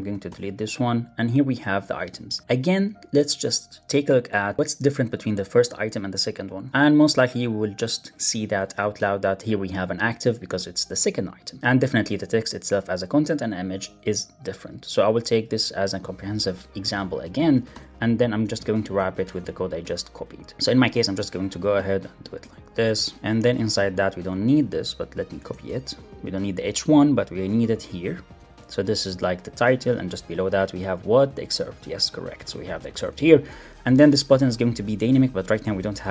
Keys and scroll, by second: 0.2 super+BackSpace, 2.2 super+Left, 2.4 alt+Up, 17.2 shift+Up, 17.3 shift+super+Left, 17.6 super+BackSpace, 18.8 Up, 18.9 super+Right, 19.1 Return, 19.3 super+v, 21.1 super+x, 21.2 super+BackSpace, 22.3 Return, 22.7 super+z, 23.1 super+v, 23.5 super+Left, 23.7 shift+super+Right, 24.5 alt+Up, 25.2 alt+Up, 25.4 super+x, 25.6 super+BackSpace, 27.6 alt+Up, 28.3 super+v, 29.8 alt+Up, 30.6 super+v, 31.0 alt+Left, 31.5 alt+shift+Right, 32.9 super+s, 34.1 alt+shift+Right, 34.6 alt+shift+Right, 34.8 alt+shift+Left, 36.0 shift+Right.